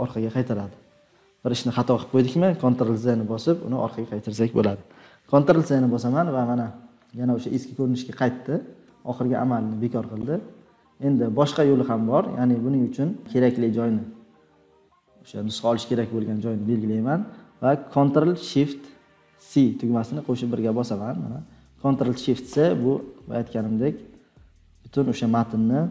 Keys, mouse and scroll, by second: 7.5-10.3 drag, 10.8 scroll down 2, 11.4-11.8 scroll down 2, 11.9 scroll, 15.2 click.